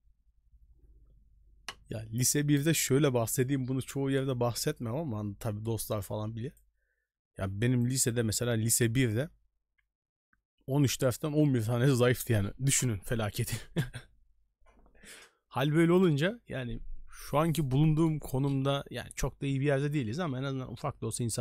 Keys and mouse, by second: 6.0-6.5 drag, 7.9 click.